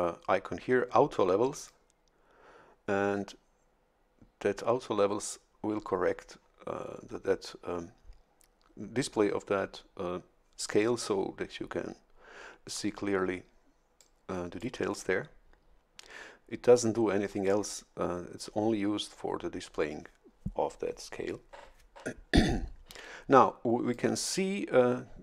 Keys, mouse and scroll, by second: 1.5 click, 13.9 click, 23.3 click.